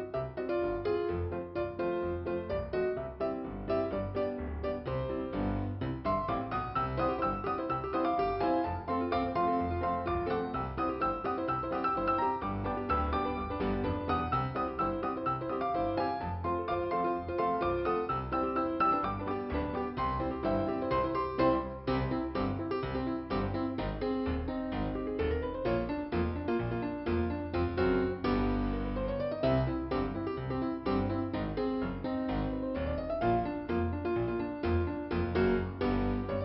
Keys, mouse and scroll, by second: 2.2 right click, 3.4 click, 8.1 click, 9.9 click, 11.8 click, 14.3 right click, 15.0 click, 16.1 click, 17.1 click, 17.2 click, 19.0 click, 19.7 click, 19.9 click, 21.3 right click, 22.3 scroll down 1, 25.5 ,, 31.7 scroll up 2, 33.0 click, 36.1 click.